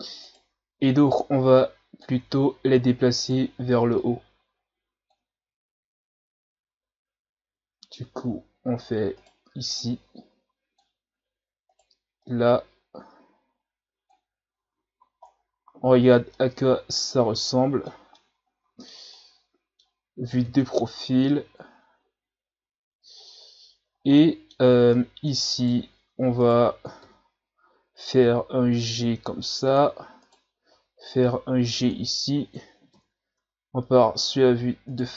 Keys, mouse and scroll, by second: 0.2 right click, 0.8-2.2 drag, 2.2 ctrl+z, 3.2 right click, 4.0-5.4 drag, 5.4 ctrl+z, 9.1 right click, 9.8-11.7 drag, 11.7 right click, 12.2-14.6 drag, 14.6 Tab, 15.0 a, 15.3 scroll down 3, 16.3-20.4 middle drag, 20.4 KP_3, 21.3-21.7 scroll up 5, 23.9 scroll up 2, 24.2-25.6 middle drag, 25.6 right click, 25.8 Tab, 26.4 right click, 27.0 KP_3, 28.3 g, 30.2 right click, 30.7 g, 32.9 KP_1, 33.4 Tab, 34.2 Tab, 34.9 right click.